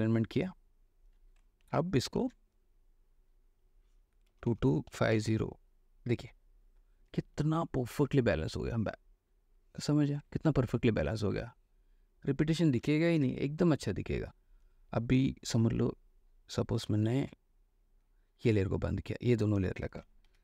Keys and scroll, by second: 1.9 ctrl+d, 2.2 ctrl+h, 4.5-5.3 typing, 7.3 space, 10.4 alt+space, 12.9 ctrl+space, 13.3 ctrl+w, 19.9 space.